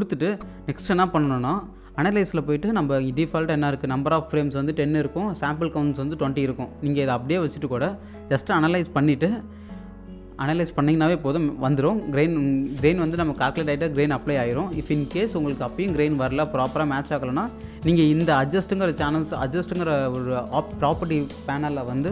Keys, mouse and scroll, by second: 0.3 click, 11.1 ctrl+Num_Lock, 11.1 click, 14.2 click.